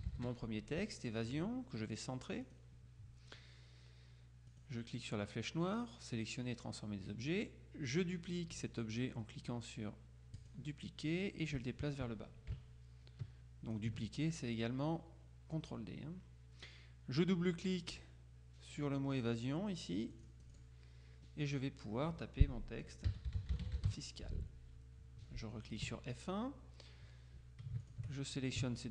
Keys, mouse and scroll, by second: 0.0-0.8 typing, 2.5 click, 4.6 click, 10.5 click, 11.3-14.3 drag, 20.2 click, 22.9-24.4 typing, 25.9 F1, 27.9 shift+click.